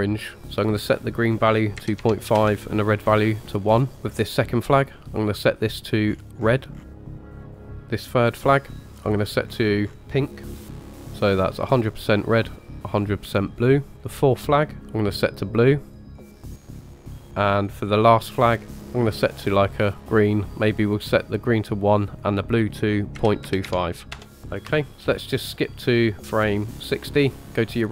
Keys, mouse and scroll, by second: 4.1 click, 5.1 click, 8.1 click, 8.8 click, 14.0 click, 14.9 click, 17.8 click, 18.6-21.2 drag, 24.9 click, 26.1 click.